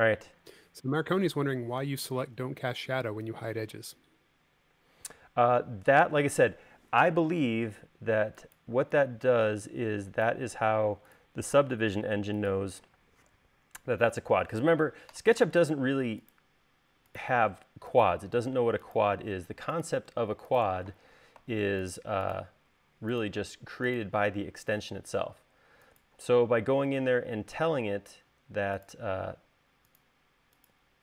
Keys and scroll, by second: 1.9 u, 7.0 e, 10.6 l, 13.1 space, 15.4 l, 19.5 space, 25.1 l, 27.5 space, 29.6 l.